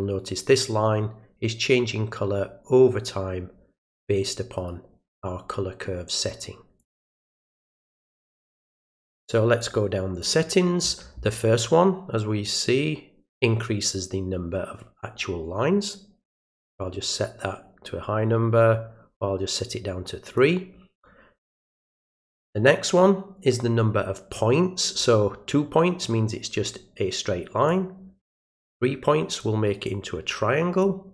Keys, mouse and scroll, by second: 4.6 right click, 6.8 click, 8.2 click, 9.6-10.2 drag, 12.4-20.4 drag, 22.1-25.0 drag, 27.7-29.4 drag, 29.9 click.